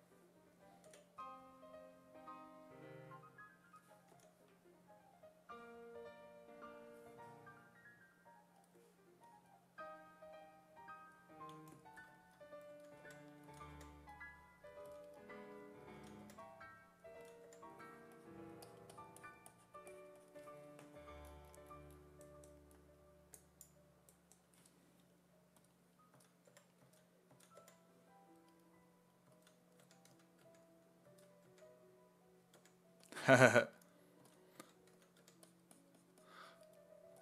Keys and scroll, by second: 0.9 b, 4.2 i, 12.5-14.9 typing, 16.0 s, 16.3 5, 17.2 s, 17.5 5, 25.9-28.1 typing, 29.3-31.5 typing, 32.6 1, 34.0-35.7 typing, 37.1 s.